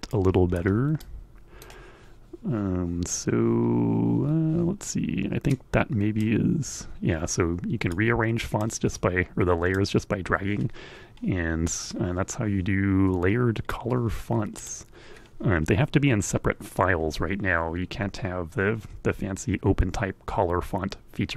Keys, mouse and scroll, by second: 0.5 click, 4.8-5.9 drag, 7.4 click, 8.3-9.4 drag, 11.1-13.3 drag, 14.1 click.